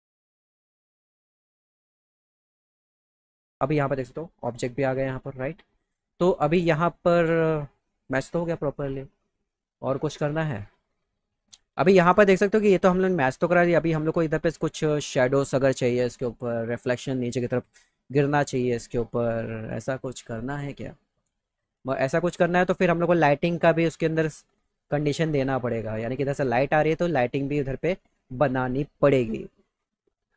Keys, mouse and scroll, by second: 0.1 shift+click, 0.4 click, 0.5 click, 0.9 click, 1.1 click, 1.3 click, 1.7 click, 2.4 right click, 2.5 right click, 2.7 click, 4.5 click, 11.2 click.